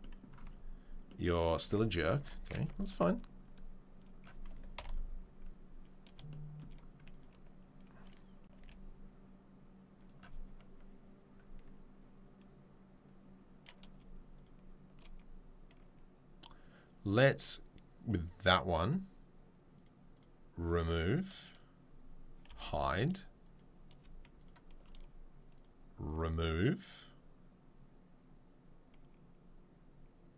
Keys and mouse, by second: 0.5 Tab, 1.6 Tab, 2.2 2, 2.7 alt+click, 4.8 ctrl+l, 8.5 g, 14.3 shift+click, 14.3 shift+right click, 19.7 click, 19.8-20.1 middle drag, 20.1 click, 20.2-20.6 middle drag, 20.6-23.5 drag, 22.5 h, 23.5-25.5 middle drag, 25.5 click, 25.6-26.0 middle drag, 26.0-30.3 drag.